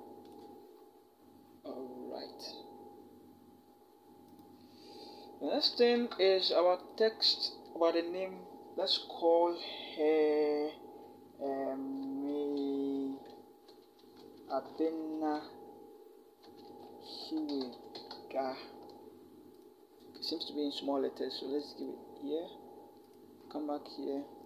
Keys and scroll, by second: 5.8 t, 11.8-14.6 typing, 16.2-17.7 typing, 19.8 typing.